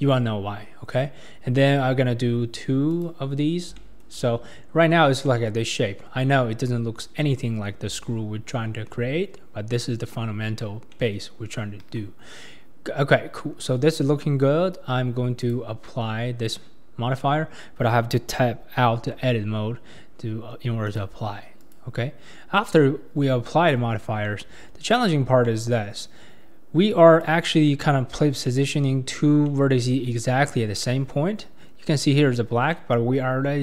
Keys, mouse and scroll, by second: 2.9 click, 3.4-3.7 scroll down 4, 3.7-6.3 shift+middle drag, 6.3 KP_1, 7.3-8.0 scroll up 2, 10.5 scroll down 2, 10.9 middle click, 11.8 KP_1, 13.1 scroll up 2, 13.6-14.3 scroll down 2, 15.4-18.4 drag, 19.0 Tab, 20.8-23.7 drag, 23.7 Tab, 24.3 middle click, 24.8-25.4 scroll up 5, 25.5-26.9 middle drag, 26.9 click, 27.7 middle click, 28.1-28.5 scroll up 5, 28.5 middle click, 29.1 scroll down 3, 29.5-30.5 middle drag, 30.5 scroll up 1, 30.8-33.6 middle drag.